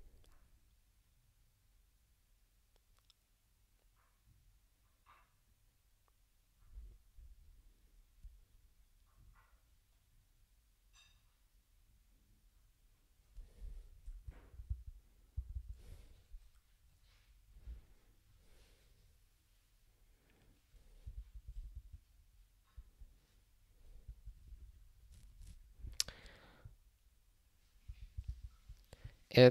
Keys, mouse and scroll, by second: 14.5 super+b, 15.3 super+b, 15.5 super+b, 21.4 super+b, 24.0 ctrl+s, 27.8 ctrl+a, 28.1 ctrl+space, 28.3 ctrl+n.